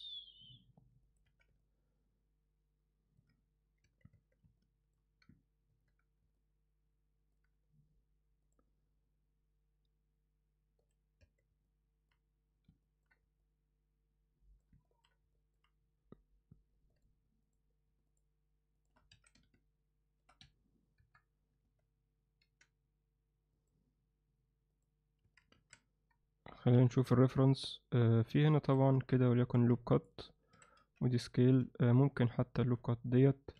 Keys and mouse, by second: 1.2 z, 1.6-3.2 alt+middle drag, 3.8 Tab, 4.1 Tab, 4.6-4.9 alt+middle drag, 5.7 ctrl+2, 6.3-7.3 alt+middle drag, 8.4 click, 10.8 click, 11.2 Tab, 11.6 alt+middle click, 12.8 ctrl+alt+middle click, 13.4-14.6 alt+middle drag, 14.8 ctrl+alt+middle click, 15.3 alt+middle click, 16.9 click, 17.5 click, 18.1 shift+click, 18.8 shift+click, 19.1 alt+s, 21.0 KP_7, 21.6 z, 22.4 g, 24.7 click, 25.2 a, 26.7 KP_1, 28.4 alt+middle click, 28.8 z, 29.4 ctrl+r, 30.5 s, 32.6 x.